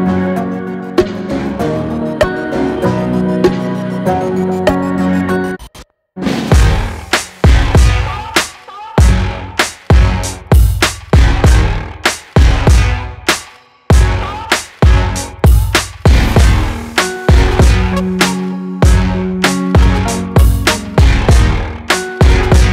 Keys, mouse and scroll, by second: 0.5 space, 0.8 click, 1.0 space, 4.0 scroll down 1, 6.9 scroll up 1, 8.7 click, 9.2 right click, 10.8 click, 13.5 right click, 14.7 click, 17.5-18.0 scroll up 1, 19.3 click, 19.7 space, 21.8 click, 21.9 space, 22.6-22.7 scroll down 1.